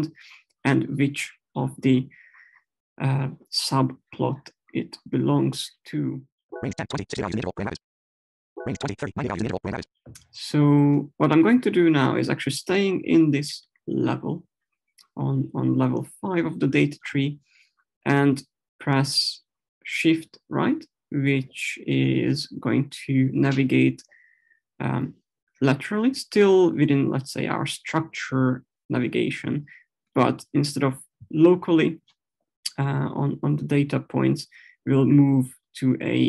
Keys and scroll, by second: 6.5 Up, 8.0 Right.